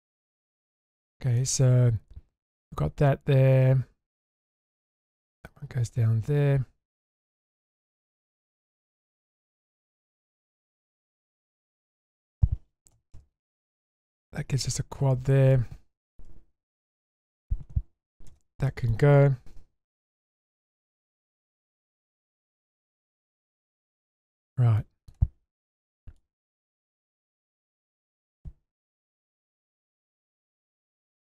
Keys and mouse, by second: 0.9 click, 1.4-5.5 middle drag, 11.6 click, 12.1 shift+click, 12.9 m, 13.9-15.5 middle drag, 16.2 2, 17.0 alt+click, 18.3 ctrl+x, 18.7 middle click, 19.5 1, 20.0 click, 21.0-21.8 drag, 22.4 click, 23.3-24.8 middle drag, 25.1 click, 25.9 middle click, 26.6 click, 27.2 click, 28.3 click, 28.9-30.3 middle drag, 30.6 click, 31.2 click.